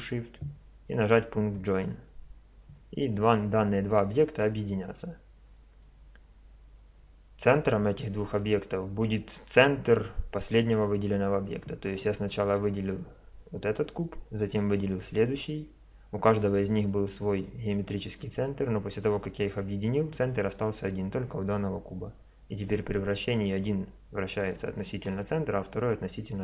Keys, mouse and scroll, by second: 1.5-3.3 drag, 4.8-6.5 middle drag, 12.3 right click, 22.6 r.